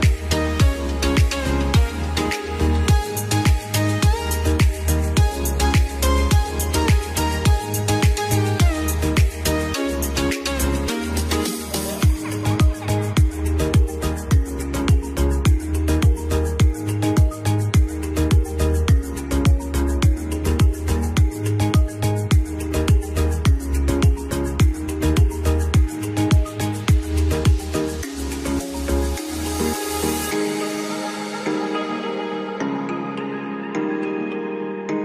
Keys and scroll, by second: 4.3 r, 5.0 ctrl+z, 6.0 F2, 14.4 F2, 26.8 F2.